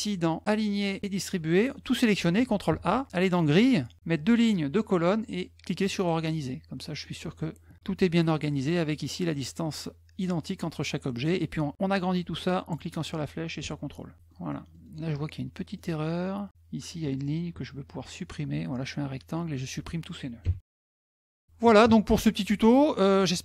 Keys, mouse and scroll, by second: 1.2 click, 2.5 ctrl+a, 3.3 click, 5.7 click, 6.8 middle click, 12.6-14.1 drag, 14.1 middle click, 14.5 middle click, 14.5-15.0 scroll up 3, 14.7 middle click, 14.9 middle click, 16.5 scroll down 1, 19.3 click.